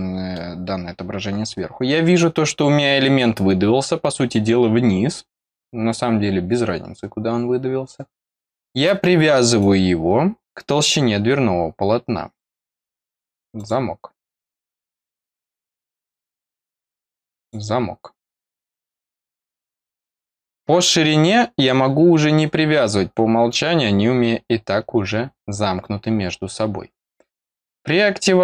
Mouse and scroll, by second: 9.5-12.3 drag, 13.5 click, 14.7-16.2 drag, 17.3 click, 27.5 click.